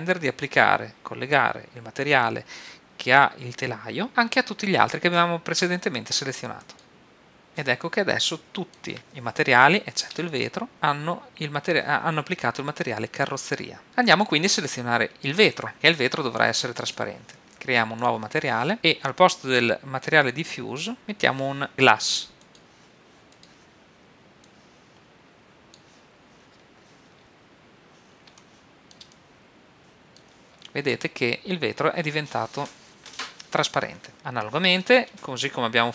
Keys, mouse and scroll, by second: 7.8-11.0 middle drag, 13.8-15.1 middle drag, 15.7-16.8 right drag, 18.0-21.0 drag, 21.0 x, 21.0 shift+a, 23.4-26.4 drag, 27.5-31.3 middle drag.